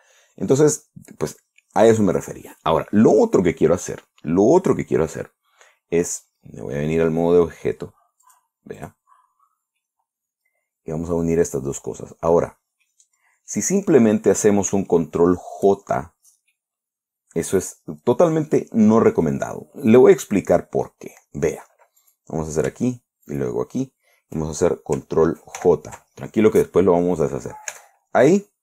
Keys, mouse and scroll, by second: 8.7 click, 9.2 click, 10.2-13.5 middle drag, 13.8-14.2 scroll up 1, 16.3-16.6 shift+scroll down 1, 17.0-19.9 middle drag, 20.1 scroll up 2, 20.4-21.5 drag, 22.5 right click, 23.8 shift+right click, 26.0 ctrl+j, 28.2 Tab.